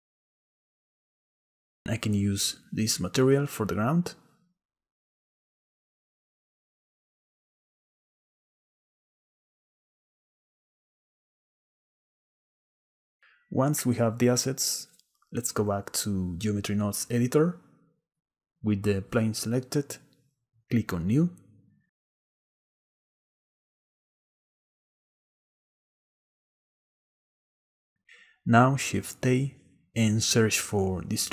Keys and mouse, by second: 0.1 click, 0.4 shift+middle click, 8.2 click, 9.1 middle click, 9.8 middle click, 10.7 click, 10.8 middle click, 10.9 click, 11.0 middle click, 11.9-13.3 middle drag, 14.9-18.1 drag, 21.7 click, 23.2 click, 28.2 click, 28.8 shift+a.